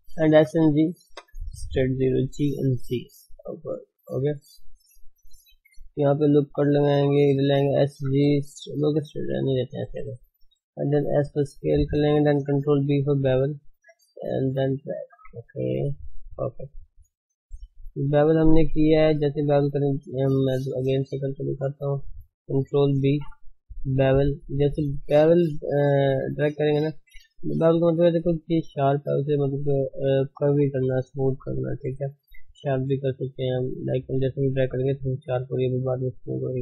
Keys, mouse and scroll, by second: 0.0 s, 2.2 g, 5.9 ctrl+r, 7.7 s, 10.4 s, 12.7 ctrl+b, 14.7 scroll up 4, 15.0 shift+middle click, 15.3 scroll up 1, 15.4 Tab, 15.8 scroll down 4, 16.0-16.7 middle drag, 16.7-17.2 scroll up 4, 17.2 middle click, 17.7-18.0 scroll up 2, 18.0 Tab, 19.2 middle click, 20.1 ctrl+z, 20.6 shift+middle click, 21.1 ctrl+z, 21.4 ctrl+z, 22.9 ctrl+b.